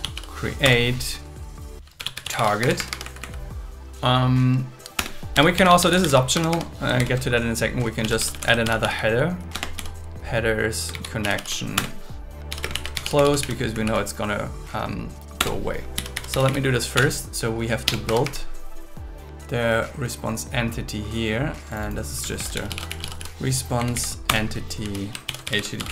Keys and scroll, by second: 0.6 Return, 2.6 Escape, 3.0 Right, 5.0 Return, 6.3 Escape, 7.0 shift+8, 8.0 shift+h, 8.6 shift+h, 9.5 Return, 10.9 shift+c, 11.2 shift+o, 11.8 Return, 12.7 shift+2, 13.6 Right, 15.4 Return, 17.0 BackSpace, 17.8 BackSpace, 18.0 Escape, 22.4 shift+r, 24.2 Return, 25.2 shift+h.